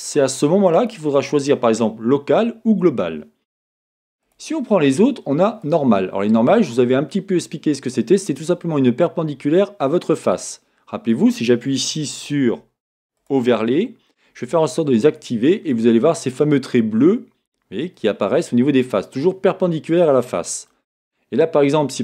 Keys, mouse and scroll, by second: 4.2-6.8 drag, 6.8-10.8 middle drag, 13.2-15.7 drag, 15.7-22.0 middle drag.